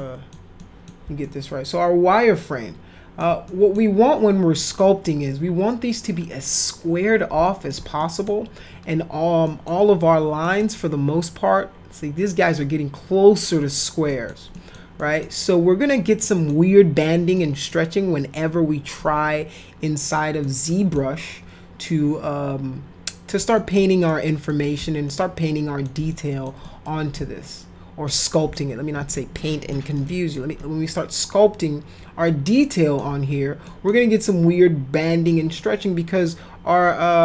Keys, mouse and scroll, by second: 0.0 middle click, 0.6 middle click, 1.2-3.2 alt+middle drag, 3.5 middle click, 4.6 middle click, 7.4 alt+middle click, 8.0 middle click, 9.4 middle click, 10.4 middle click, 14.1 middle click, 14.5 middle click, 15.0 middle click, 16.2 middle click, 17.4 middle click, 20.4 middle click, 21.2-23.3 alt+middle drag, 23.5 middle click, 24.5 middle click, 25.0 alt+middle click, 26.1 middle click, 26.6 middle click, 27.2 alt+middle click, 28.6 alt+middle click, 29.4 alt+middle click, 30.0 alt+middle click, 30.6-33.0 alt+middle drag, 33.7 middle click, 35.3 middle click.